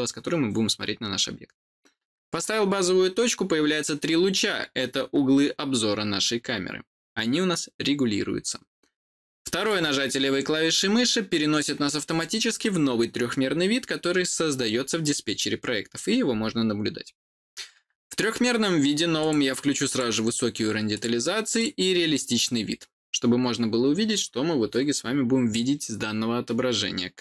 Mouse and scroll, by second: 9.5 click, 19.1 click, 19.8 click, 21.5 click.